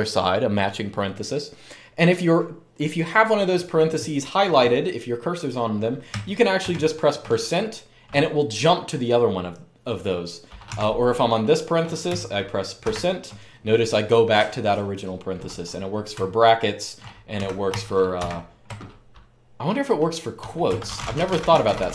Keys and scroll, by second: 6.4 shift+5, 10.4 typing, 12.6 typing, 15.9-17.9 typing, 19.9-21.9 typing.